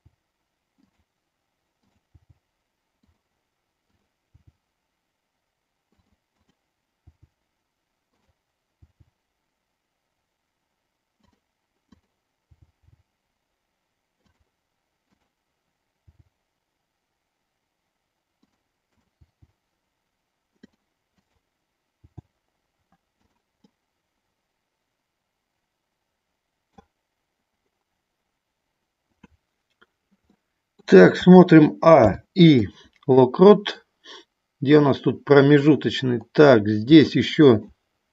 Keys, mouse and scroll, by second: 2.3 g, 3.8 click, 4.4 g, 8.8 g, 11.9 click, 12.5 g, 12.9 g, 15.0 click, 16.0 g, 19.4 g, 20.6 click, 22.0 g, 23.1 click, 23.6-26.7 middle drag, 30.2 scroll up 1, 30.5 middle click, 31.1 a, 32.0 i, 33.7-35.6 drag, 37.0 shift+middle click.